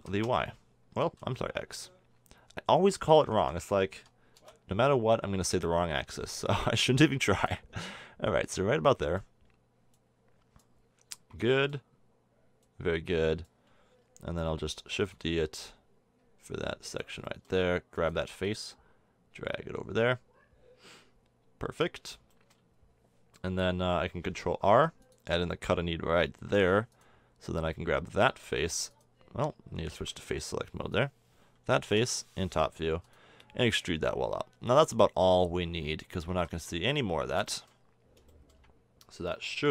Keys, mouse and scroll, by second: 0.0 s, 3.9 s, 7.2 click, 8.2-9.9 drag, 14.8 shift+d, 22.3-24.6 middle drag, 24.6 ctrl+r, 27.7 middle click, 31.9 KP_7, 32.9 e, 33.4-35.5 drag, 36.3 a, 36.5 Tab.